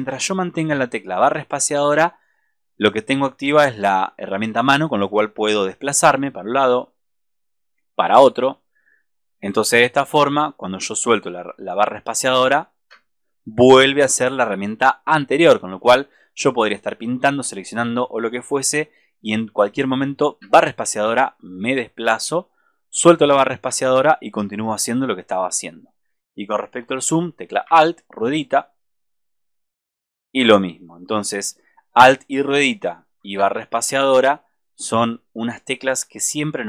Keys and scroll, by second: 33.3 alt+space.